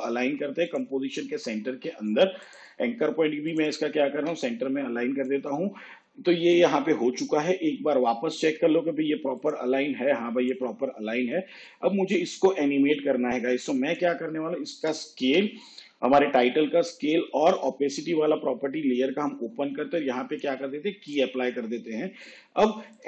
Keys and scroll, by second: 15.5 s, 17.5 shift+t.